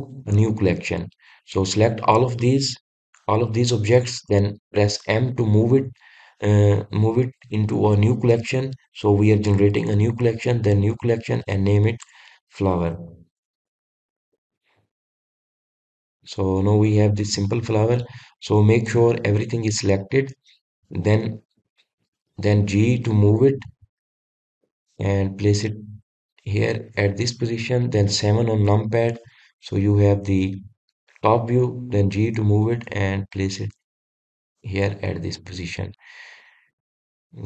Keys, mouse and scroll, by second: 2.4 click, 3.6 click, 6.0 m, 17.0-19.3 middle drag, 19.3 click, 19.8 click, 20.9-21.7 scroll down 1, 21.7-22.3 scroll up 2, 22.3-22.9 middle drag, 22.9-23.6 scroll down 2, 23.6-24.6 middle drag, 24.6 g, 29.6 KP_7, 30.6-31.1 scroll down 2, 31.1-31.7 scroll up 2, 31.7-33.0 scroll down 2, 33.0 g, 36.3-37.2 middle drag, 37.2-37.4 scroll up 1.